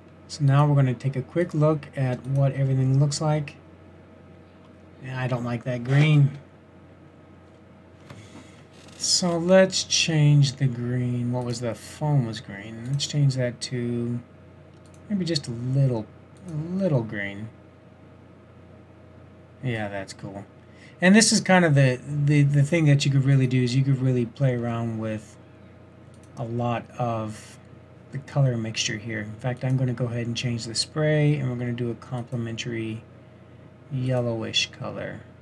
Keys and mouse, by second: 0.5 click, 4.5-5.4 middle drag, 11.8-15.1 drag, 23.3-26.4 drag, 26.6-28.5 drag, 29.7-31.8 drag.